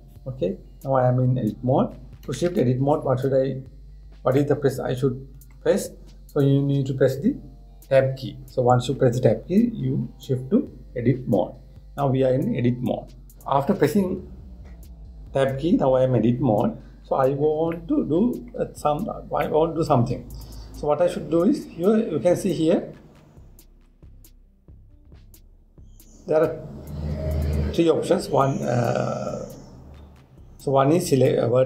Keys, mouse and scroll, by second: 0.3 Tab, 3.4 Tab, 5.0-8.1 middle drag, 18.0-18.4 scroll up 1, 18.4-19.6 middle drag, 19.6 scroll down 1, 19.7 scroll up 1, 20.1-21.5 middle drag, 21.5-22.3 scroll up 3, 22.3 scroll up 1, 22.5 scroll down 2, 23.2 scroll up 1, 23.9 scroll down 2, 24.2-24.9 scroll up 1.